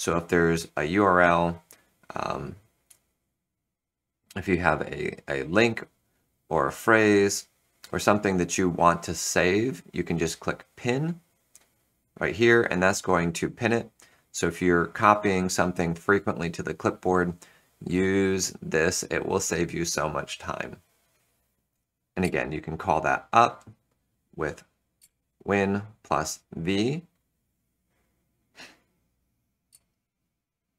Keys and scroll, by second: 22.1 super+v, 24.9 super+v.